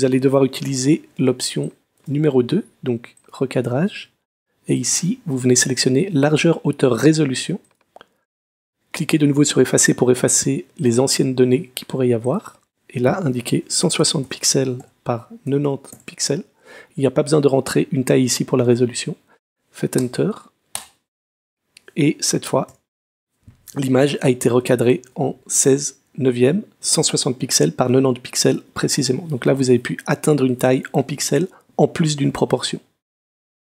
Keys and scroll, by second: 0.6 super+0, 1.3 super+space, 1.8 space, 13.3-16.1 typing, 20.0 Return, 22.7 super+0, 24.2 super+-.